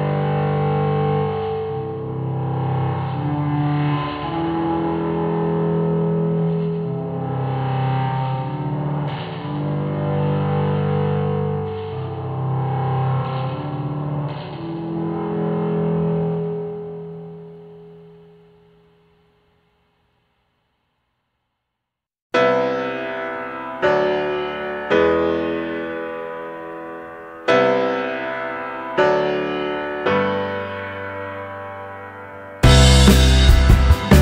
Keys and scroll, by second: 29.7 Right.